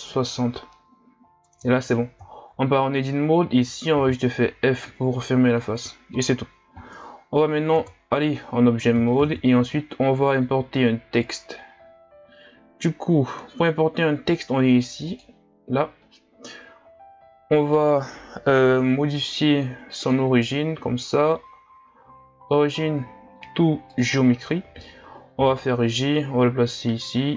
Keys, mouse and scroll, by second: 0.8-1.5 scroll down 2, 1.5 Tab, 2.3 scroll down 2, 2.7-4.0 scroll up 1, 4.0 f, 7.8 Tab, 9.2 shift+a, 20.0-25.4 drag, 25.4 g.